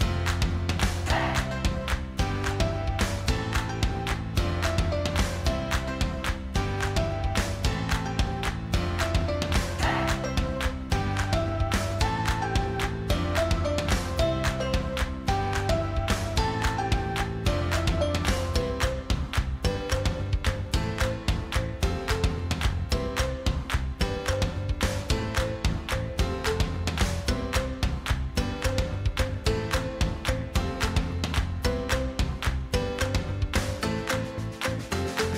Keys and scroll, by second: 15.5 Delete, 24.8 ctrl+e.